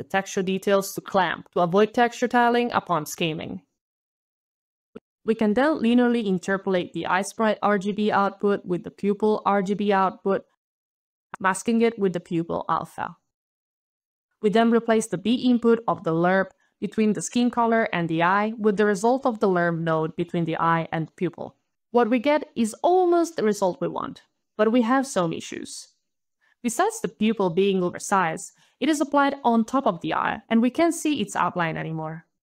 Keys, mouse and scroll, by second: 0.0 alt+scroll down 1, 1.7 alt+click, 2.7 alt+middle click, 4.1 alt+right click, 4.2 alt+right click, 4.4 alt+scroll, 4.5 alt+right click, 4.7 alt+right click, 4.8 alt+right click, 5.7 alt+click, 7.7 alt+l, 7.8 alt+e, 7.9 alt+r, 8.0 alt+p, 9.0 alt+Return, 10.2 alt+click, 10.9 alt+click, 11.1 alt+click, 11.6 alt+click, 13.4 alt+right click, 13.4 alt+scroll, 13.5 alt+right click, 13.6 alt+click, 13.7 alt+click, 14.0 alt+right click, 14.1 alt+right click, 15.4 alt+click, 20.6 alt+middle click, 23.8 alt+right click, 25.3 alt+scroll, 26.8 alt+click, 28.0 alt+click, 28.7 alt+scroll up 3, 28.7 alt+KP_1, 29.0 alt+KP_Enter, 30.7 alt+KP_2, 31.0 alt+KP_Enter.